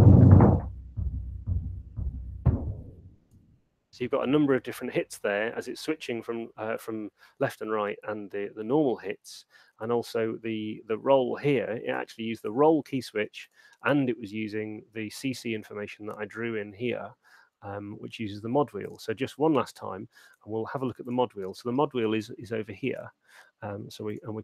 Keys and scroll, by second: 3.8 space.